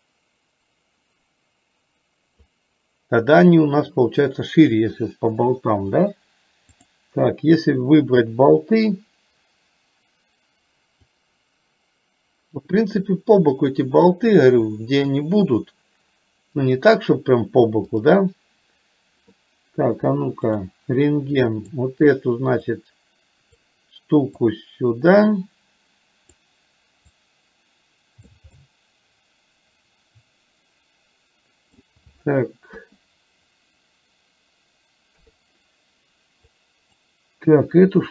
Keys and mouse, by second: 6.9 click, 11.3-14.4 drag, 16.8-18.2 drag, 21.4 click, 22.9 click, 24.7-26.5 drag, 27.2-28.4 drag, 28.5-31.9 middle drag, 32.8 KP_1, 36.8 click, 36.8 KP_3.